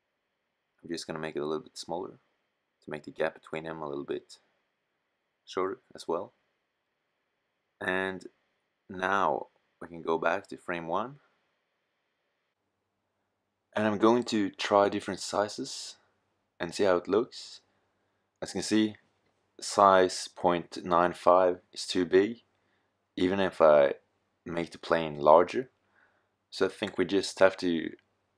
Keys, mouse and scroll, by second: 3.2 middle click, 8.3-9.1 middle drag, 11.0-14.6 middle drag, 16.4-17.4 middle drag, 20.1 s, 25.4-25.8 middle drag.